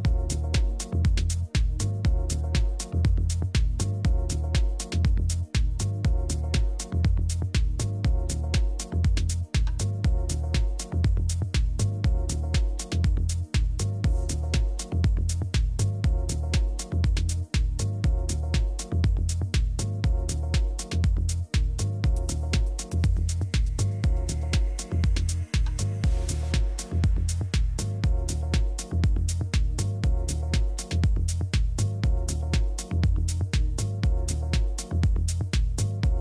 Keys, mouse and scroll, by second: 2.3 a, 3.7 b, 6.0 g, 9.9 a, 15.1 click, 17.0 right click, 18.6 e, 33.0 a, 35.3-36.2 drag, 35.9 a, 36.1 a.